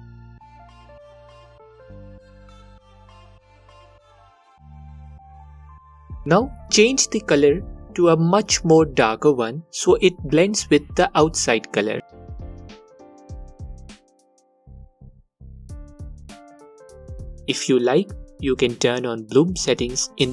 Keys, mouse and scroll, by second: 3.4-4.8 alt+drag, 4.9-6.0 drag, 12.6-20.3 alt+drag.